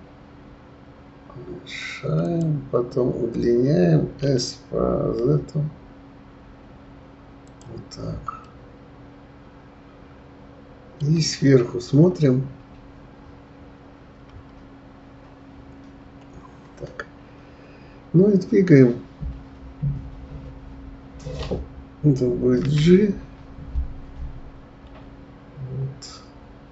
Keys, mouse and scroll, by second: 4.2 s, 8.4-11.4 middle drag, 11.9 KP_7, 14.3 KP_9, 15.6-16.0 scroll up 4, 22.6 g.